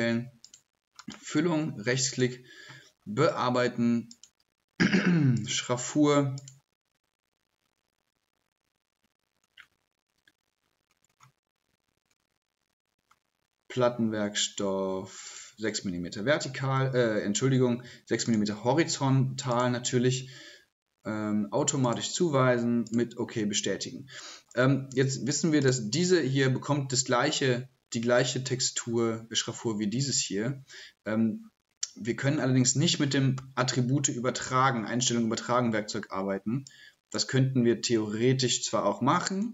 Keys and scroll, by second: 33.1 typing.